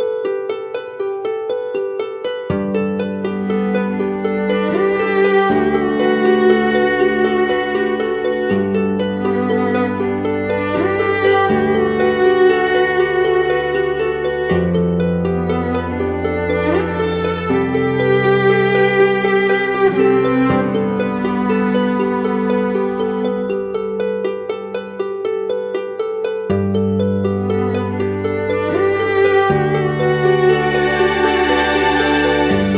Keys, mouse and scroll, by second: 11.6-12.0 typing, 12.7 ctrl+=, 12.8 ctrl+=, 13.7 scroll down 1, 15.1 typing, 17.5 double click, 21.8 double click, 26.4 ctrl+-, 26.8 ctrl+-.